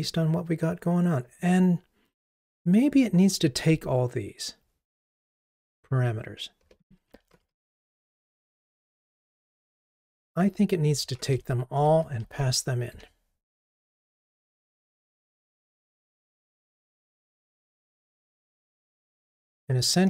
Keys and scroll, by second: 7.4 alt+Up, 9.6 super+c, 11.2 alt+Up, 13.0 super+v.